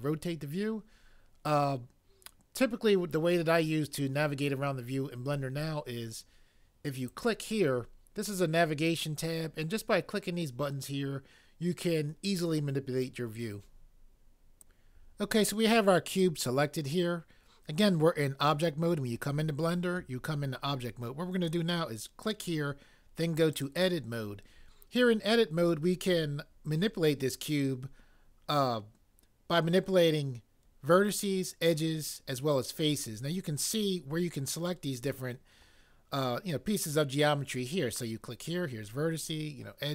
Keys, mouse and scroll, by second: 14.6 click, 22.2 click, 23.5 click.